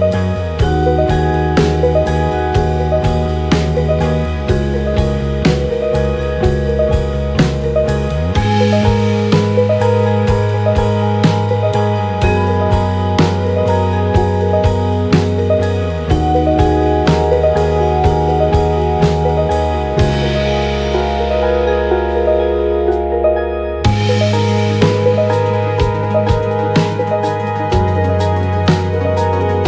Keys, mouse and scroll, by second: 0.8 KP_1, 3.1 click, 3.6-9.1 drag, 5.5-9.9 middle drag, 8.1 ctrl+Delete, 9.8 click, 11.1-13.1 shift+drag, 11.1-29.6 shift+middle drag, 12.5-22.7 right drag, 13.7-16.0 drag, 16.9-18.6 drag, 19.2 click, 20.1 click, 21.8 g, 23.2 click, 23.2-25.4 right drag, 23.6 g, 24.9 g, 25.6 click, 25.6-28.3 right drag, 25.9 g, 27.2 space, 27.9 space, 28.5 shift+right click.